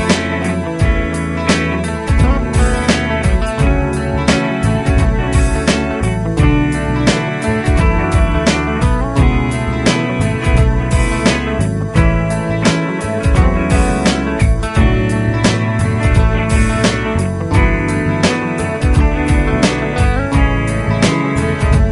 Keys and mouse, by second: 0.4 Left, 1.3 Right, 2.0 Down, 3.5 F2, 6.8 ctrl+click, 9.3 ctrl+click, 10.0 Home, 13.7 ctrl+click, 15.3 F3, 15.8 F3, 17.9 F2, 21.1 ctrl+click.